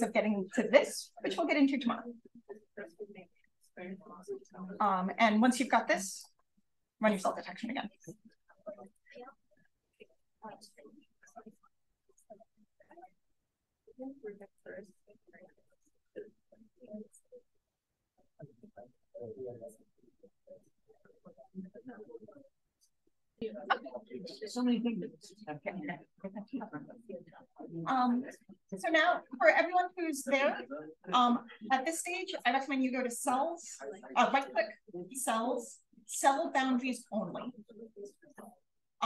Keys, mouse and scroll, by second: 4.7 click, 8.8 click, 26.1-29.4 scroll up 2, 29.4-31.8 scroll up 1, 31.8 right click, 38.7 click.